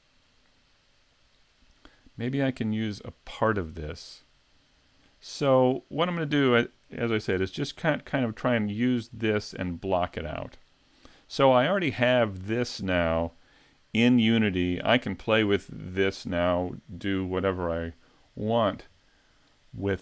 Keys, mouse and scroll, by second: 7.4 ctrl+Up, 8.4-8.9 scroll down 3, 9.0 right click, 10.9-11.7 scroll down 1, 11.7 scroll down 1, 17.4-18.4 scroll down 2, 18.4-18.8 scroll down 1, 18.8 middle click.